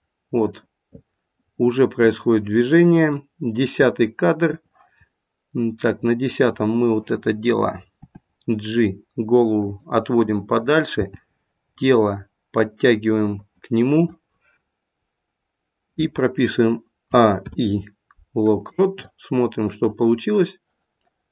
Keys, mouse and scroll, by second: 6.4 click, 7.9 g, 10.6 click, 17.0 a, 17.4 i, 19.9 click.